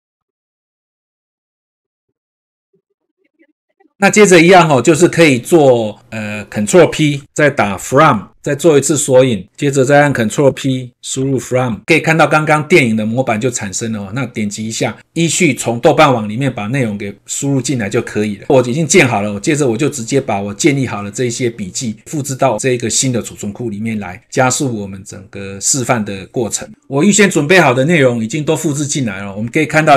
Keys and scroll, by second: 2.2 ctrl+v, 2.6 ctrl+s, 7.2 ctrl+p, 10.4 ctrl+p.